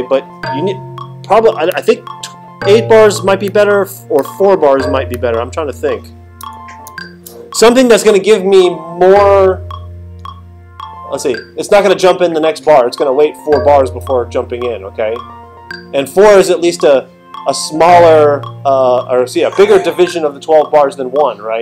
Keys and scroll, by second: 6.9 alt+super+8.